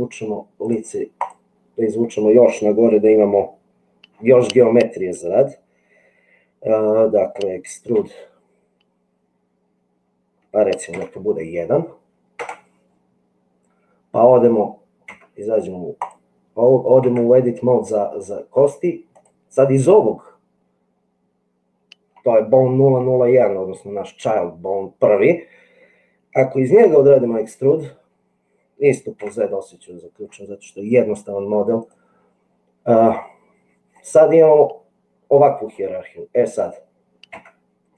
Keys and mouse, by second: 0.6 click, 8.0 e, 15.2 Tab, 17.1 Tab, 27.7 e, 33.8-35.7 middle drag, 37.4 Tab.